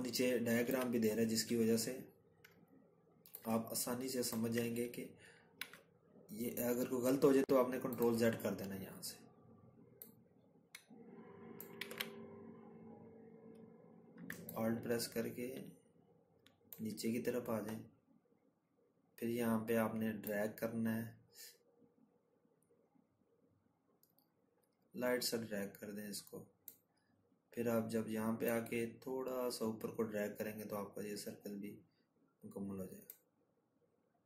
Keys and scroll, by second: 5.9 ctrl+z, 12.0 ctrl+z.